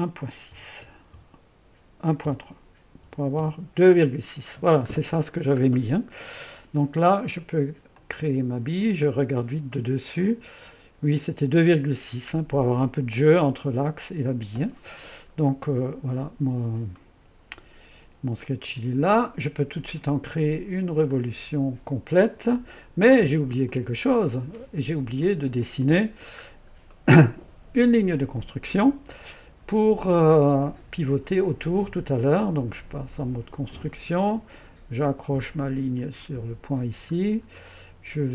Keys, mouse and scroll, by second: 0.5 KP_1, 0.8 KP_Decimal, 1.1 KP_6, 2.2 BackSpace, 3.0 3, 3.4 Return, 5.7-6.5 scroll down 1, 6.5-7.1 scroll up 1, 8.0-9.3 drag, 9.3-9.7 scroll up 1, 12.3-14.8 scroll down 1, 16.2-17.9 drag, 18.4-19.8 drag, 21.1-24.7 drag, 25.2 click, 26.0 click, 26.9 middle click, 27.2-29.6 right drag, 30.6-34.4 drag, 36.0-37.2 drag, 37.2-38.3 scroll down 2.